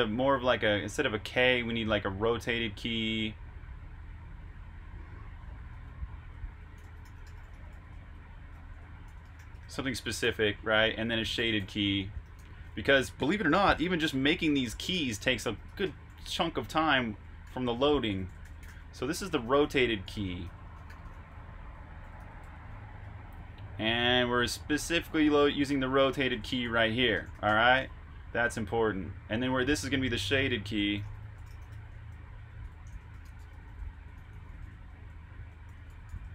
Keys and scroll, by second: 2.7-7.3 typing, 8.7-13.5 typing, 28.7-30.2 typing.